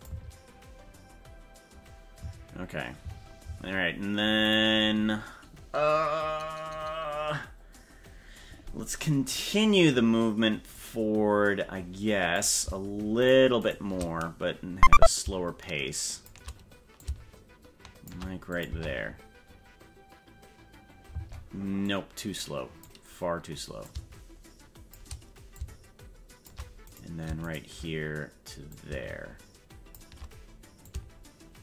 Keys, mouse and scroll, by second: 0.0 space, 2.2 space, 3.4 space, 4.5 right click, 10.7-12.4 drag, 13.3 shift+right click, 15.0-16.3 shift+drag, 17.0-18.1 shift+drag, 18.5 click, 18.6 space, 21.1 space, 21.8-22.8 drag, 23.8-25.0 shift+drag, 25.5 shift+click, 26.9 right click, 27.5 shift+right click, 28.7-30.0 shift+drag, 30.8 shift+click.